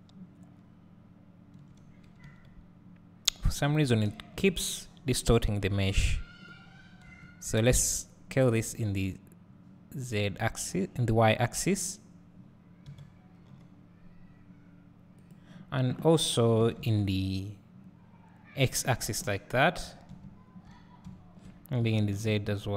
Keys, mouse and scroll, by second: 2.3 s.